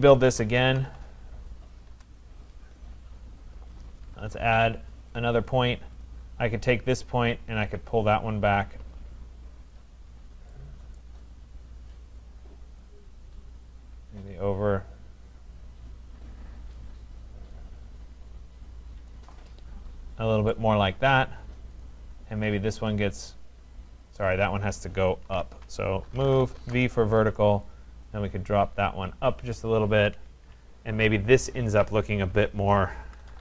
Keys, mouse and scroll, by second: 0.4-1.3 typing, 1.9 Return, 3.6 click, 4.2 4, 4.9 Return, 6.0 click, 9.7 click, 10.1-10.5 scroll, 11.0 middle click, 11.0 right click, 11.5 middle click, 11.6 middle click, 15.1 scroll, 16.7 click, 17.6 click, 19.1 click, 20.5 right click, 21.8 click, 24.3 click, 25.3 ctrl+z, 25.8-27.1 typing, 27.6 click, 29.2 click, 29.9 Escape, 29.9-30.7 typing, 32.1 click, 32.9-33.4 typing.